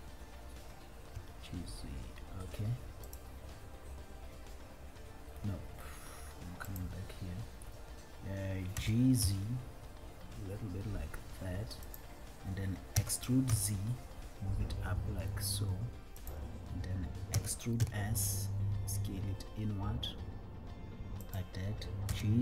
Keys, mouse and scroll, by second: 0.0-1.3 drag, 1.3 z, 7.0-8.9 drag, 8.9 g, 9.6 z, 12.2 click, 13.2 e, 13.9 z, 16.6 click, 18.2 e, 21.6 click, 21.6 s, 22.3 g.